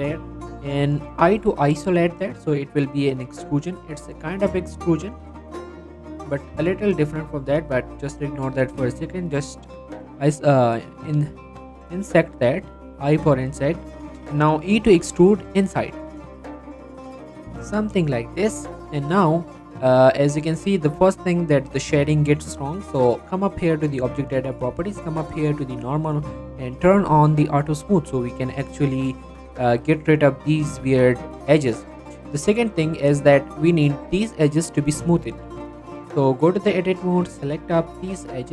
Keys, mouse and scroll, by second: 6.4-7.0 middle drag, 7.4 shift+middle click, 12.6 scroll up 2, 12.7 middle click, 13.0-13.6 shift+middle drag, 13.6-15.0 shift+middle drag, 15.0 e, 18.0 e, 18.2 scroll down 1, 18.3 middle click, 18.8 scroll up 1, 19.2 middle click, 19.4 scroll down 1, 19.9 middle click, 20.4 Tab, 20.8 middle click, 22.2 right click, 23.6 click, 25.6 click, 27.8 click, 28.3 middle click, 28.5-29.0 scroll up 1, 29.0 scroll down 1, 29.2-30.4 middle drag, 30.8 shift+middle click, 31.4 middle click, 32.7 scroll up 1, 32.9 middle click, 33.1 scroll down 1, 33.2 shift+middle click, 35.5 scroll up 1, 35.6 Tab, 37.0 click, 37.4 scroll up 1, 38.0 click, 38.4 middle click.